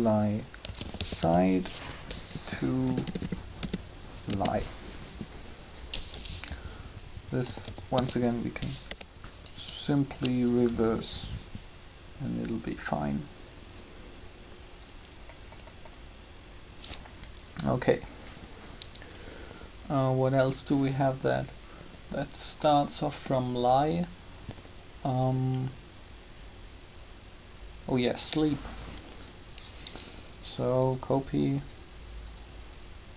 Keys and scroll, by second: 0.5-1.0 typing, 2.8 BackSpace, 4.3 Return, 7.5-9.1 typing.